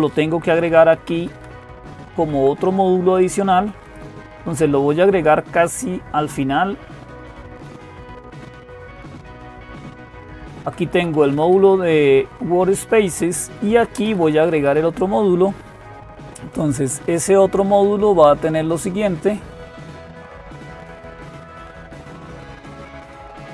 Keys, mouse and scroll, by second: 0.1 Down, 0.3 Down, 0.5 Down, 0.8 Down, 1.0 Down, 1.1 Down, 1.3 Down, 1.5 Down, 1.7 Down, 2.0 Down, 2.2 Down, 2.9 Page_Down, 3.1 Page_Down, 3.2 Page_Down, 3.4 Page_Down, 3.6 Page_Down, 3.9 Page_Down, 4.5 Down, 4.5 Page_Down, 4.5 …, 4.7 Page_Down, 5.3 Up, 6.0-7.5 Up, 7.7 Up, 7.7-9.1 Up, 9.6 Down, 9.6 Up, 10.3 Down, 10.5 Down, 10.7 Down, 11.1 Down, 11.1 Down, 11.3-13.1 Down, 13.3 Down, 13.4 Down, 13.5 Down, 13.8 Up, 14.0 Up, 14.1 Up, 14.3 Up, 14.5 Up, 16.3-23.5 drag.